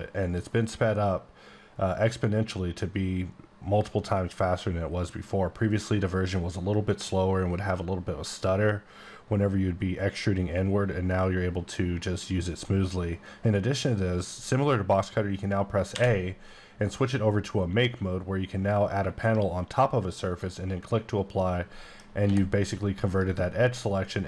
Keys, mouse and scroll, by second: 15.9 a, 20.3 click, 21.4 middle click, 22.2 g, 23.1 right click, 24.1 middle click.